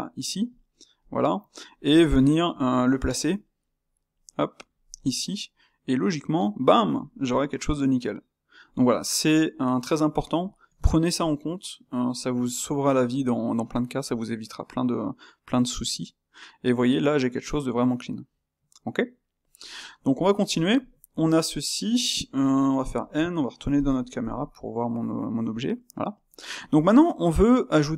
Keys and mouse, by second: 1.0-3.2 middle drag, 3.2 g, 5.0-6.1 middle drag, 6.1 Tab, 7.1-18.9 middle drag, 19.4-22.9 ctrl+middle drag, 22.9 n, 24.2 KP_0, 25.7-27.9 middle drag.